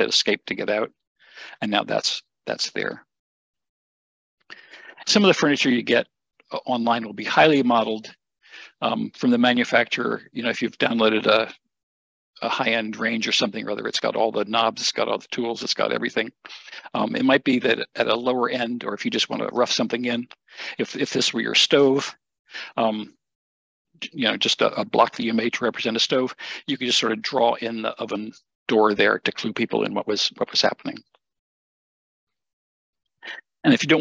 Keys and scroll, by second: 0.3 Escape, 32.2 Escape, 32.5 Escape.